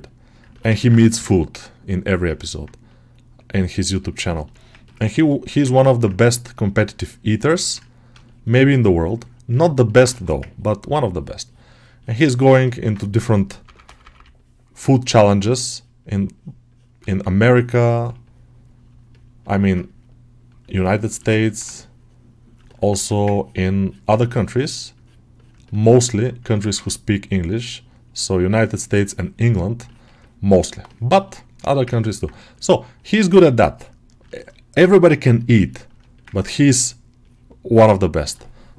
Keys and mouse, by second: 0.4 alt+shift+middle click, 0.6 ctrl+middle click, 2.3 ctrl+middle click, 2.7-4.0 middle drag, 4.1 ctrl+middle click, 4.4 alt+middle click, 5.0 alt+shift+click, 5.0 alt+shift+right click, 5.3 alt+middle click, 5.7 ctrl+middle click, 6.5-7.6 middle drag, 8.1-9.3 shift+middle drag, 9.4 shift+middle click, 9.7 middle click, 11.0-12.1 drag, 12.1 ctrl+alt+middle click, 12.5 middle click, 13.7 [, 13.9 [, 15.9 click, 16.2 click, 16.9 ctrl+alt+middle click, 17.3 ctrl+alt+middle click, 17.8 ctrl+middle click, 18.1 alt+middle click, 19.0 alt+middle click, 19.3 alt+middle click, 20.6-22.7 shift+middle drag, 23.2-25.5 ctrl+drag, 25.5 shift+middle click, 25.8 alt+middle click, 28.0 click, 28.2 click, 28.5-29.7 drag, 29.7 ctrl+alt+middle click, 30.1 alt+middle click, 30.4 shift+middle click, 30.7 alt+middle click, 31.2 alt+shift+middle click, 31.8 ctrl+alt+middle click, 33.2 alt+middle click, 34.1-35.3 alt+middle drag, 36.0 middle click, 36.2-38.7 ctrl+alt+middle drag.